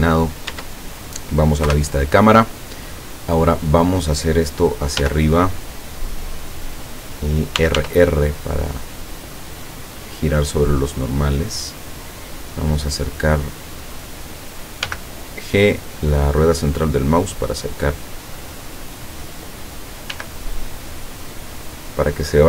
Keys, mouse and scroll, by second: 0.0 scroll down 1, 0.6 Tab, 1.7 KP_0, 3.6 right click, 5.1 g, 6.9 click, 7.6 r, 11.5 click, 12.5-13.2 scroll up 2, 14.9 g, 15.6 middle click, 19.0 click, 20.1 g, 22.0 click.